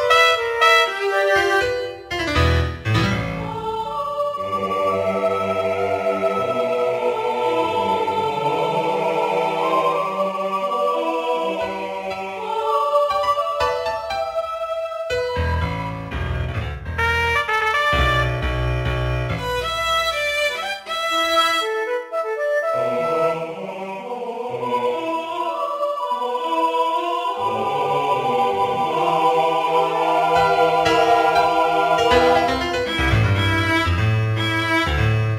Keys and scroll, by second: 2.7 ctrl+z, 7.5 ctrl+d, 12.1 ctrl+z, 19.6 ctrl+z, 29.2 ctrl+z, 32.6 ctrl+z.